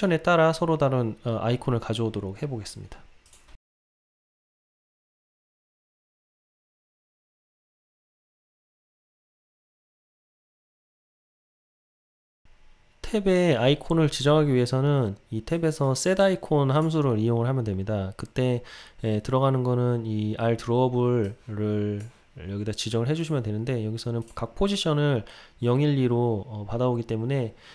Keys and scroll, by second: 5.5 Return, 11.0 Return.